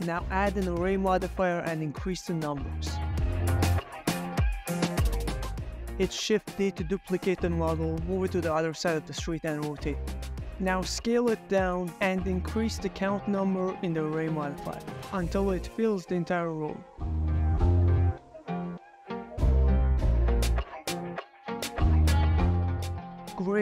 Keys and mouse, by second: 0.7 ctrl+middle click, 1.8 click, 2.1 middle click, 2.4 ctrl+middle click, 2.8 ctrl+middle drag, 3.1 g, 3.2 x, 4.0 shift+middle click, 4.8-9.7 typing, 7.0 drag, 7.8 Return, 8.4 middle click, 8.7 Escape, 9.2 ctrl+click, 9.4 click, 9.6 shift+click, 11.1 middle click, 11.1 shift+middle click, 11.3-13.7 typing, 13.1 middle click, 14.1 click, 15.1 click, 15.3 click, 15.7 click, 16.3 click, 16.7 click, 17.4 ctrl+middle click, 17.8 ctrl+middle click, 18.1 shift+middle click, 18.9 click, 19.1 click, 20.1 click, 20.5-20.9 middle drag, 21.4-21.7 middle drag, 21.8-22.6 middle drag, 22.7 click, 23.2 s, 23.2 z, 23.4 Escape, 23.5 g.